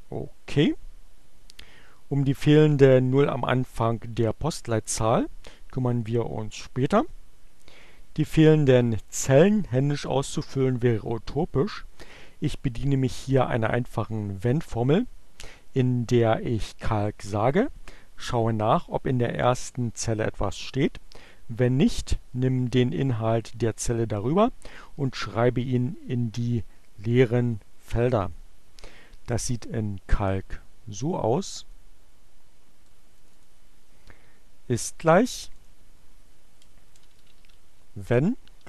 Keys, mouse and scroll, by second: 30.1-31.3 drag, 32.1 click, 33.6 click, 34.7 click, 35.4-37.5 typing.